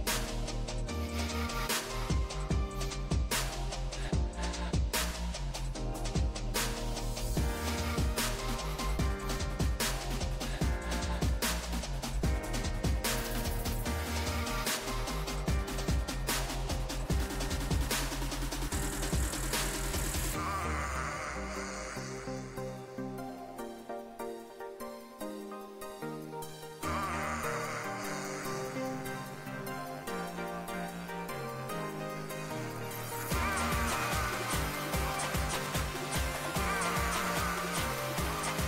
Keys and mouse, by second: 0.4-5.4 drag, 0.6 g, 1.7 g, 3.1 g, 3.8 g, 5.6 g, 7.0 click, 7.2 g, 8.3 g, 9.6 g, 11.9 g, 14.6 g, 16.6 g, 20.8 a, 21.1 a, 23.5-24.6 drag, 24.6 right click, 25.9 Tab, 26.6 z, 33.7 z, 38.3-38.6 middle drag.